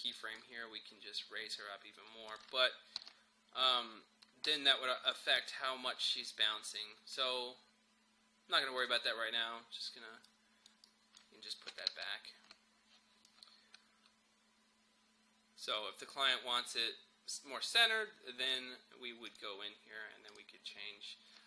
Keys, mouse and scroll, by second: 0.7-2.3 scroll down 1, 2.3 click, 3.0 u, 5.1 click, 5.6 scroll up 1, 7.0-7.7 scroll down 1, 8.8-11.9 drag, 11.9 ctrl+z, 13.3-18.6 drag.